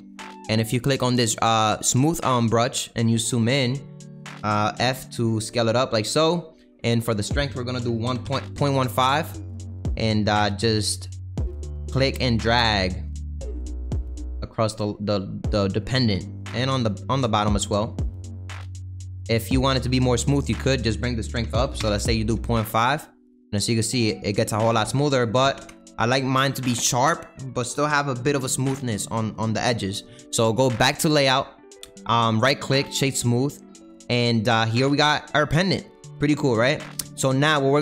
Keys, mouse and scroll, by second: 2.0 click, 3.8 middle click, 8.5 click, 9.8 middle click, 10.2-13.3 drag, 15.5 middle click, 16.1-18.8 drag, 18.8-21.7 middle drag, 21.7-25.4 drag, 26.1-30.9 middle drag, 30.9 click, 31.5-33.1 middle drag, 33.1 right click, 34.0 middle click, 34.7 click, 34.9 middle click, 35.4-35.7 scroll down 2, 35.7-37.8 middle drag.